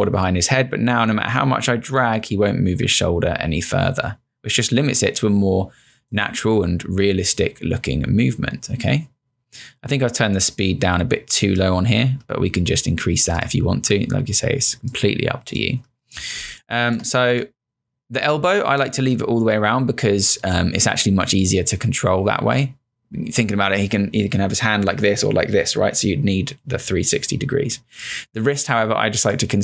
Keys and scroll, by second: 16.4 space.